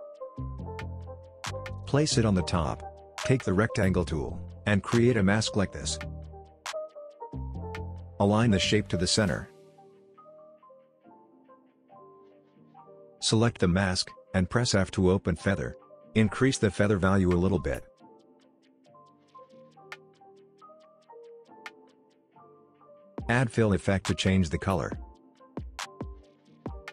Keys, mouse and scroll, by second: 1.1-2.1 drag, 14.5 f, 17.3-20.4 drag, 23.5-24.9 typing, 25.9-26.9 drag.